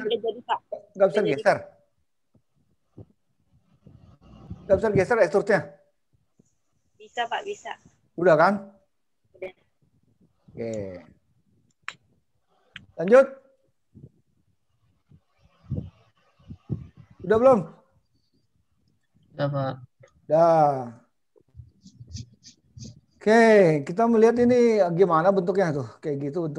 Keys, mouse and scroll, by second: 2.2-2.6 scroll down 3, 3.1 middle click, 5.2 scroll up 4, 9.2-10.4 scroll down 1, 10.7 middle click, 13.8 middle click, 19.8 middle click, 23.3-23.6 scroll down 3, 25.5 click.